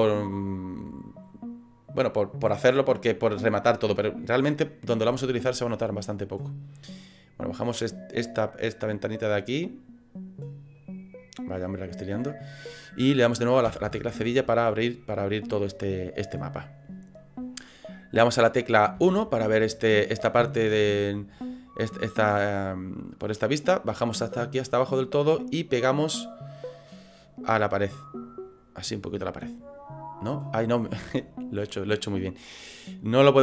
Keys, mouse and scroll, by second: 11.7 click, 13.7 /, 14.3 scroll down 4, 14.7 middle click, 19.0 KP_1, 19.8-20.3 scroll up 9, 20.5 shift+middle click, 22.1 click, 25.3 click, 29.2 middle click, 30.5 scroll down 4, 31.9 scroll down 3.